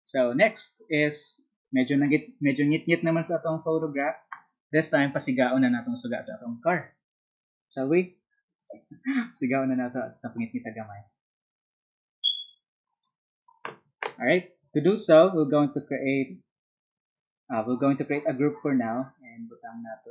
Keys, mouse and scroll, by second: 8.5 alt+click, 9.7-12.9 alt+drag, 18.2 alt+click.